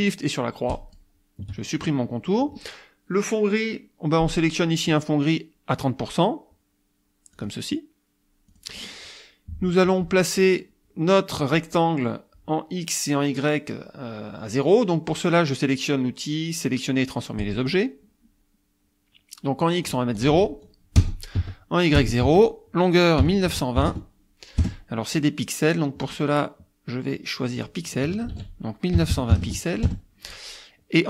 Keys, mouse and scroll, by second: 0.7 shift+click, 7.4 click, 8.5 click, 17.4 click, 19.9 click, 20.3 ctrl+a, 21.4 Tab, 22.0 KP_0, 22.3 Tab, 23.2 KP_1, 23.5 KP_9, 23.8 KP_2, 24.6 KP_Enter, 26.1 click, 27.6 click, 28.1 ctrl+click, 28.3 ctrl+a, 29.1 KP_9, 29.3 KP_2, 29.5 KP_0, 29.9 KP_Enter.